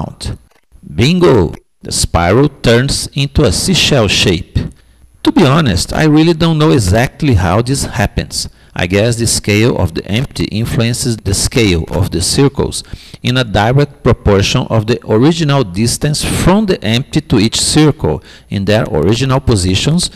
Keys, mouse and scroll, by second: 1.4-3.3 middle drag, 4.4-13.1 middle drag, 14.6-16.4 middle drag, 16.8-18.7 middle drag.